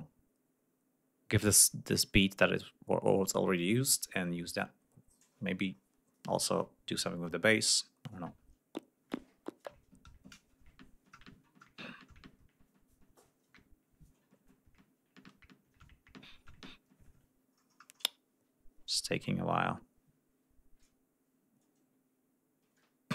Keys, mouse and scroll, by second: 23.0 F1.